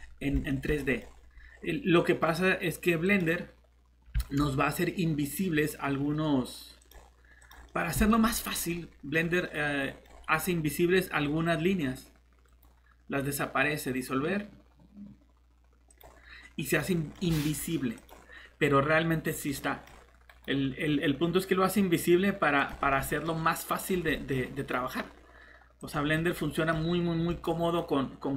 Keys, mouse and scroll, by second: 1.4-1.9 scroll up 1, 1.9 middle click, 3.0 click, 7.7 middle click, 8.3 scroll down 1, 8.5 middle click, 11.8-12.5 scroll up 1, 12.5 right click, 15.9 click, 16.8 middle click, 18.0 click, 19.4 middle click, 20.3 right click, 22.6 click, 22.9 middle click, 23.3 scroll down 1, 23.8 click, 24.1 middle click, 24.5 right click, 25.8 click, 26.1 middle click, 27.3 click, 27.6 right click.